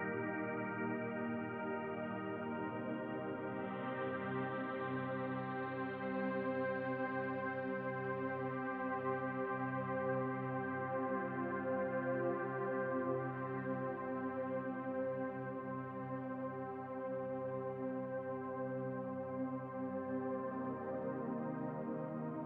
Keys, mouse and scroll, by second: 0.3-0.6 scroll down 1, 0.8 shift+middle click, 1.3-1.7 scroll down 1, 1.7 middle click, 3.8-4.3 scroll down 1, 5.0 click, 9.0-9.3 scroll down 2, 9.3 middle click, 15.3 middle click, 16.5 click.